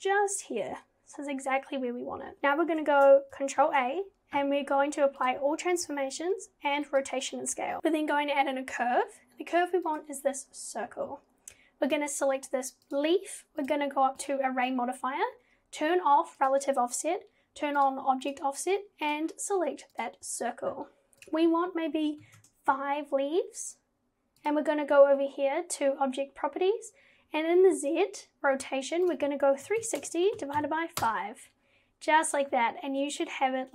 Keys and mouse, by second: 3.6 ctrl+a, 6.0 ctrl+a, 7.8 shift+a, 11.9 click, 16.4 click, 17.8 click, 18.3 click, 21.4-22.5 drag, 24.4 click, 29.1-31.0 drag.